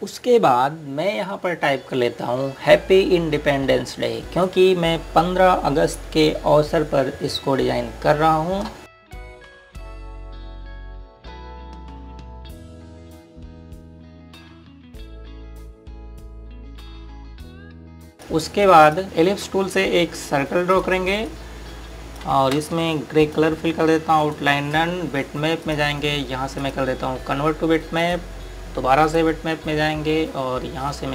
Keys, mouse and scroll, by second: 0.9 scroll up 1, 3.1-3.7 scroll down 1, 8.8 typing, 9.5 click, 10.2 F8, 10.3 click, 10.6 BackSpace, 10.9 Return, 11.5 space, 12.0 k, 13.2 click, 14.3 ctrl+space, 14.5 click, 17.8 scroll up 1, 18.1-18.5 scroll down 1, 18.5 click, 19.2 scroll down 1, 19.6 click, 20.3 scroll up 1, 21.7 click, 23.5 space, 24.2 click, 25.2 right click, 26.6 click.